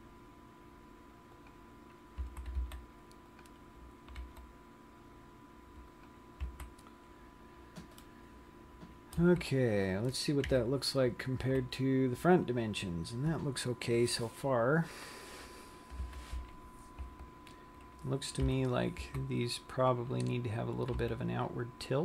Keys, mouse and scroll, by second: 2.0 click, 2.6 a, 3.2 c, 4.8 g, 6.5 click, 7.0 a, 8.5 middle click, 9.5 z, 10.8 KP_1, 11.8 z, 16.3 KP_3, 17.6 Tab, 18.9 KP_1, 19.6 z, 21.5 r.